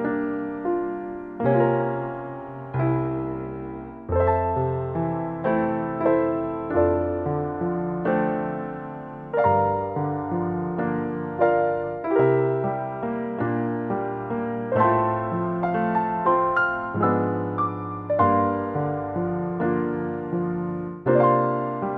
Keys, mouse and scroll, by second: 0.9 middle click, 1.4 click, 2.6-3.7 scroll up 4, 3.3 click, 3.7 click, 5.2 click, 5.9 scroll up 1, 6.1 middle click, 6.5 scroll down 3, 6.7 middle click, 7.5-8.4 scroll up 8, 8.5 middle click, 10.8 click, 13.1 click, 13.8 click, 15.1 click, 16.0-16.6 scroll down 3, 16.8 click, 17.4 middle click, 17.7 scroll down 4, 17.9 shift+middle click, 19.3-19.9 scroll down 2, 20.1 middle click, 20.7 shift+middle click, 21.8 click.